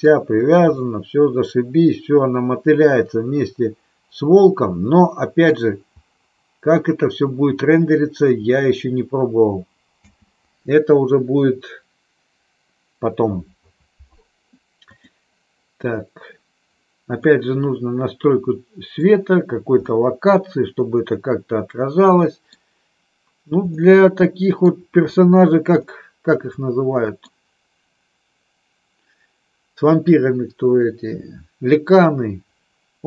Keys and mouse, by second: 0.8-5.6 middle drag, 10.1 space, 17.4-19.1 middle drag, 20.0-22.6 middle drag, 23.8-24.8 middle drag, 26.0-27.4 middle drag.